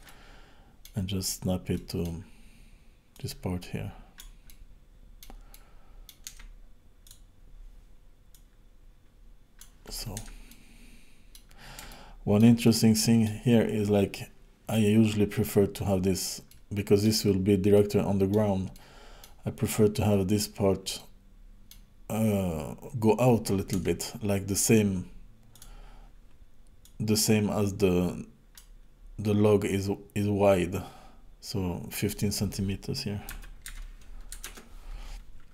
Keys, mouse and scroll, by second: 0.0 middle click, 1.7 middle click, 3.1 click, 4.5 middle click, 5.5 middle click, 6.3 Tab, 7.0 click, 8.3 click, 10.2 Tab, 10.5 middle click, 11.9 shift+middle click, 12.6 middle click, 16.5 middle click, 17.7 middle click, 18.7 middle click, 21.0 middle click, 23.7 Tab, 25.5 click, 26.8 click, 31.9 click.